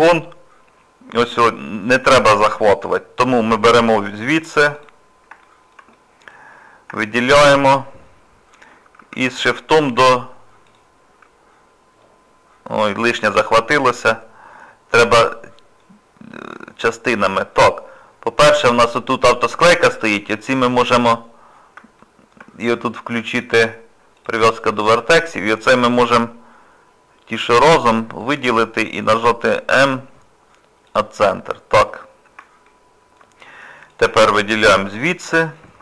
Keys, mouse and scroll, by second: 2.0 middle click, 2.5 shift+middle click, 2.9 middle click, 3.6-4.5 scroll up 2, 4.8 click, 5.4 shift+middle click, 5.9 middle click, 6.6 scroll down 2, 7.0 shift+middle click, 9.4 scroll up 2, 9.4 scroll down 1, 9.8 scroll up 1, 10.7 ctrl+click, 12.0 middle click, 13.3 middle click, 14.1 scroll down 1, 15.2 click, 15.8 middle click, 16.9 scroll down 1, 17.5-18.2 scroll up 1, 20.6 scroll up 2, 22.0 shift+middle click, 23.3 click, 28.2 click, 29.7 m, 31.5 scroll down 1, 31.9 middle click, 32.7 shift+middle click, 33.9 click, 34.7 shift+middle click.